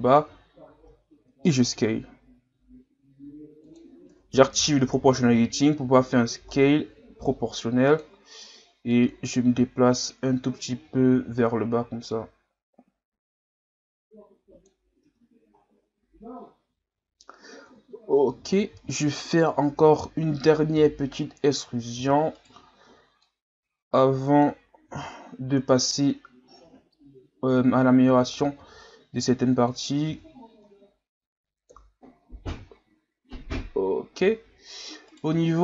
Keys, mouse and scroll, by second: 0.7 s, 4.6 o, 5.8 s, 8.9-12.0 drag, 15.0 Tab, 15.6-16.6 scroll down 1, 16.6-17.6 scroll down 1, 17.6 KP_3, 18.4-18.8 scroll up 4, 18.8 scroll down 4, 19.1 scroll up 1, 19.8 Tab, 20.8 o, 22.0 e, 23.2-24.9 drag, 24.9 r, 26.6 g, 28.5 s, 30.1 Tab, 30.7 scroll down 3, 31.7 KP_1, 32.7 scroll up 4, 33.7-34.3 scroll up 1, 34.4 scroll up 5, 35.1 right click, 35.3 Tab, 35.5-35.6 scroll up 1.